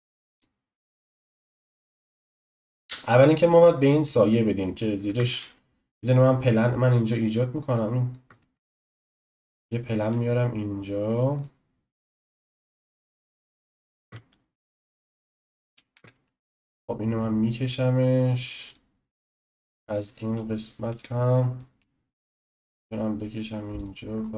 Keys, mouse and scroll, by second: 1.9 click, 3.9-5.2 scroll up 1, 5.2 shift+a, 8.4 shift+a, 10.0 s, 14.1-15.6 shift+middle drag, 15.6 s, 19.3 s, 24.2-24.3 scroll down 5.